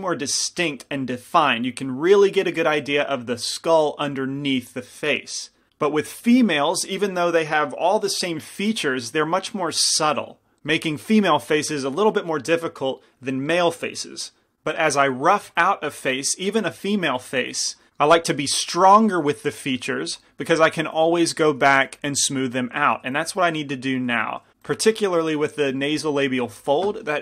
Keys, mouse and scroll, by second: 21.8 f.